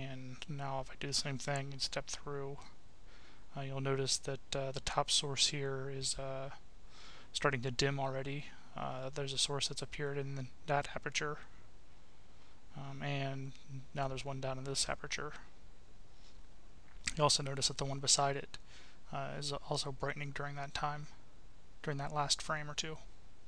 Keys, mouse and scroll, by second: 0.3 click, 3.1 click, 3.9 click, 4.7 click, 9.1 click, 11.6 click, 13.5 click, 17.2 click, 18.6 click, 20.3 click, 22.7 click.